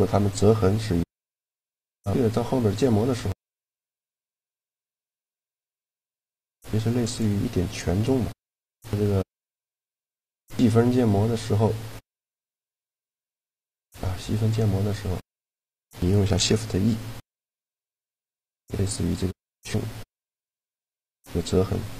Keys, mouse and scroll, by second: 0.8-4.2 right drag, 2.7 g, 5.8-7.1 right drag, 6.2 g, 8.7 Tab, 10.1-11.7 drag, 12.3 middle click, 13.1-15.0 drag, 14.0 Tab, 15.0 middle click, 16.4 shift+e.